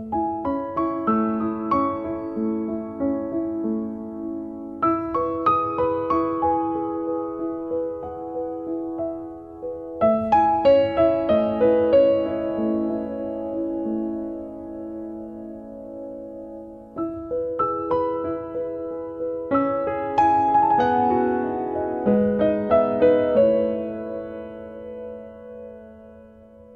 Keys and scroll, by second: 2.5 KP_Divide, 3.5 Return, 6.4 t, 9.5-10.4 typing, 12.0 r, 15.2 space, 18.4 f, 20.2 0, 20.5 KP_Decimal, 20.6 5, 21.1 Return, 22.0 Escape.